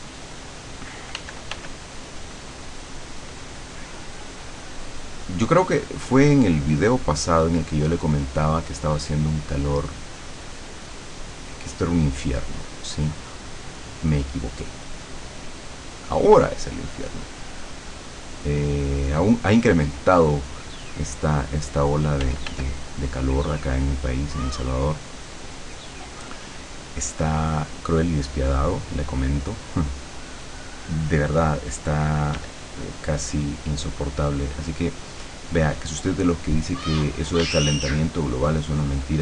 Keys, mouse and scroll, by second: 1.2 f, 2.0-16.2 drag, 16.7-18.6 drag, 20.3-22.5 drag, 22.2 f, 23.2-24.8 drag, 25.0-28.9 drag, 30.2 click, 32.4 d, 33.1-38.0 drag, 37.4 d, 38.2-39.2 drag.